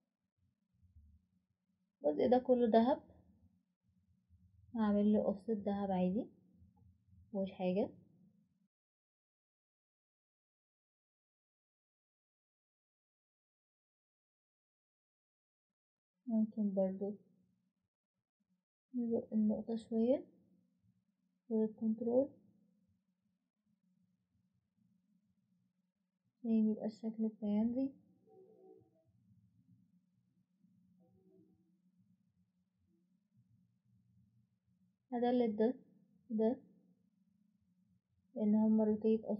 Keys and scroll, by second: 8.1 typing, 20.2 typing, 25.1 typing, 31.4 Escape, 34.4 Delete, 36.2 Delete.